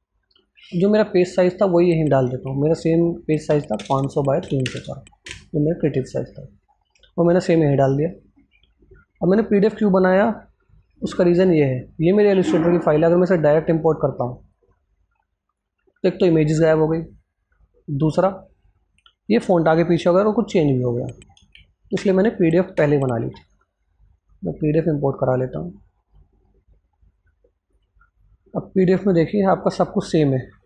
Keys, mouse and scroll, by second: 0.3 click, 6.2 Return, 6.5 scroll up 1, 7.9 click, 10.1-16.7 drag, 13.2-14.5 drag, 17.8-19.6 scroll up 1, 19.7 scroll up 1, 20.9 scroll down 2, 21.2 ctrl+a, 22.6 Delete, 23.1 alt+Tab, 24.3-27.6 drag, 28.7-30.3 scroll up 1.